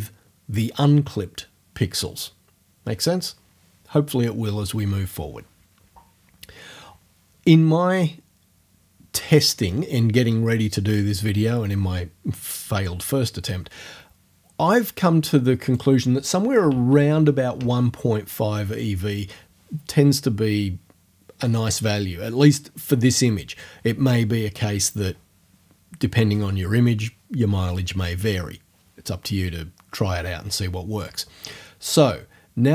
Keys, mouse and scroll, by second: 15.7 right click, 16.3-17.4 typing, 17.6 Return.